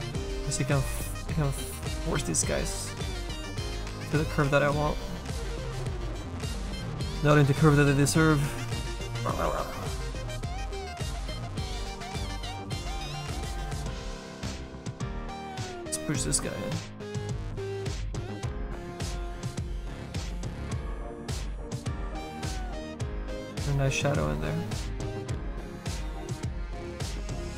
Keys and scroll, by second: 2.0 s.